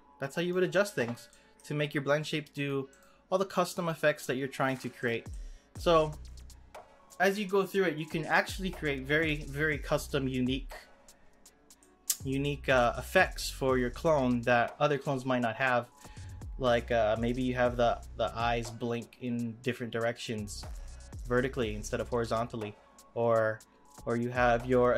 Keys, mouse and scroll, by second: 1.3-2.9 middle drag, 2.9 click, 4.2 click, 5.3-8.4 middle drag, 11.2-11.7 scroll down 2, 11.7-15.9 middle drag.